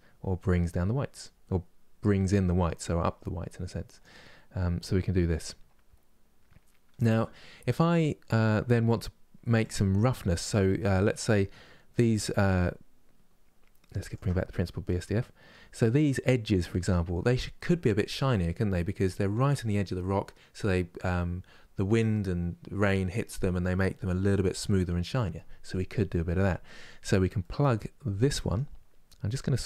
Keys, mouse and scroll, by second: 10.7-12.2 middle drag, 12.2-13.1 scroll up 1, 13.1-13.8 scroll up 1, 13.8 ctrl+shift+click, 14.9-28.0 middle drag, 28.0-29.6 drag.